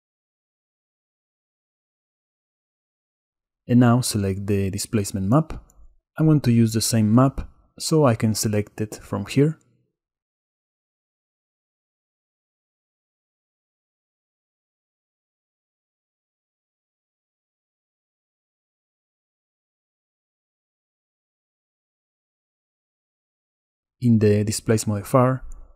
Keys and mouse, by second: 3.7-5.0 drag, 6.4-21.2 drag.